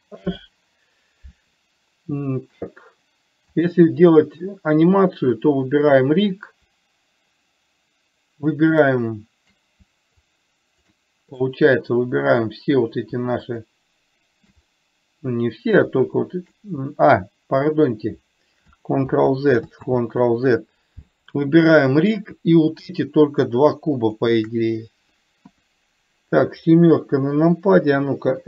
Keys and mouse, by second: 0.5 alt+h, 3.8 click, 10.5-11.3 shift+drag, 11.7-12.8 middle drag, 13.8 shift+click, 15.0-16.2 middle drag, 19.3 ctrl+z, 20.3 ctrl+z, 24.4 shift+click, 25.8 KP_1, 27.4 KP_7.